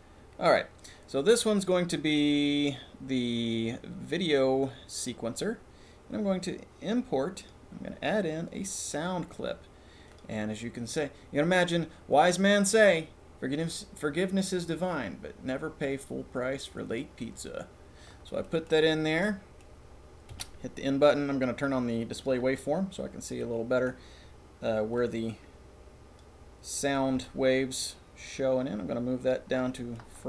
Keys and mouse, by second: 0.1 middle click, 0.2 click, 1.4 click, 7.4 click, 8.6 click, 18.4 click, 19.3 click, 20.3 n, 22.2-23.3 drag, 23.4 click, 24.9-26.2 drag, 26.8 click, 27.2 g, 29.8 click.